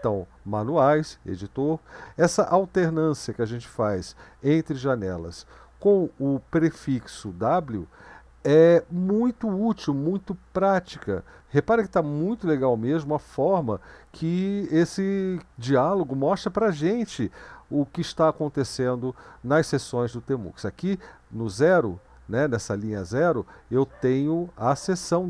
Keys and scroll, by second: 0.8 Down, 6.8 ctrl+b, 7.3 w, 11.0 Up, 11.4 Up, 11.4 Down, 12.3 Up, 12.8 Up, 22.2 Down, 22.4 Up.